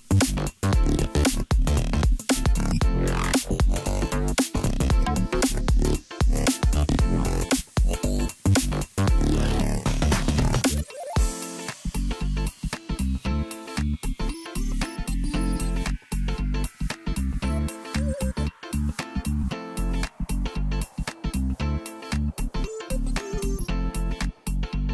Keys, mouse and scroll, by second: 1.6 shift+b, 3.9-5.5 middle drag, 5.5 g, 8.1 g, 10.5-12.7 scroll down 25, 12.7-14.2 middle drag, 14.2-15.3 scroll up 4, 15.3 Tab, 15.9-18.3 middle drag, 18.3-19.1 drag, 19.1-19.9 scroll down 1, 20.0 KP_Divide, 21.0 Tab, 22.1 KP_3, 22.9-23.6 scroll up 3, 23.8 a.